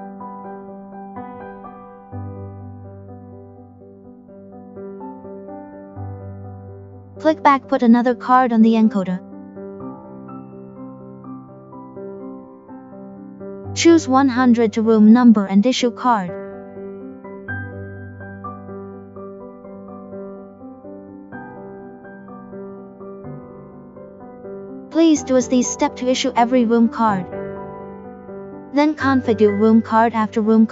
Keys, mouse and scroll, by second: 2.9 click, 6.3 click, 13.1 click, 17.0 click, 20.0 click, 22.2 click, 25.1 click.